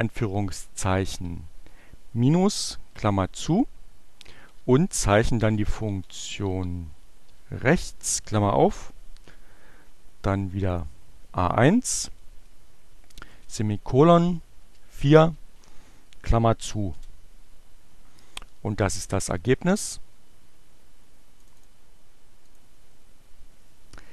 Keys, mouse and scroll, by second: 1.8 shift+9, 4.4-7.9 typing, 10.7 click, 12.5 shift+,, 14.4 4, 15.2 shift+9, 17.0 Return, 21.2 click, 22.4 click.